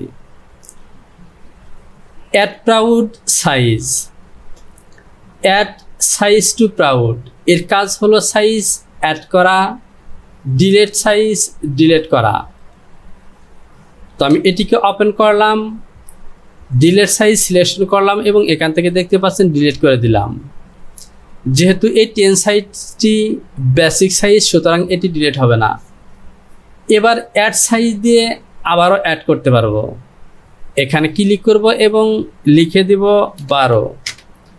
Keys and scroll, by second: 14.2 Home, 33.5 KP_1, 33.7 KP_2, 34.1 Return.